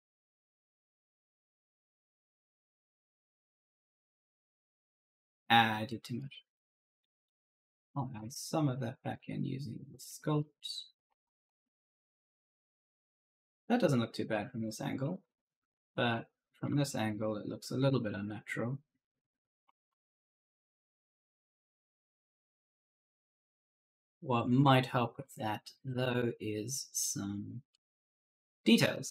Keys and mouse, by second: 1.2-5.6 typing, 1.3 right click, 7.1 right click, 7.1 e, 7.4 w, 8.5 click, 10.0-17.0 typing, 10.0 right click, 18.8-23.0 typing, 23.8 right click, 24.2-25.9 typing, 26.8 right click.